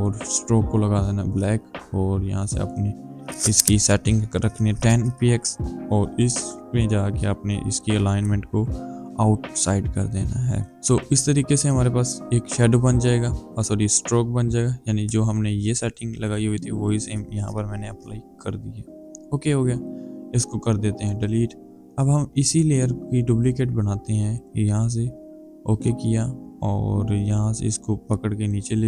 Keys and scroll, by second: 4.6 KP_0, 10.7 Return.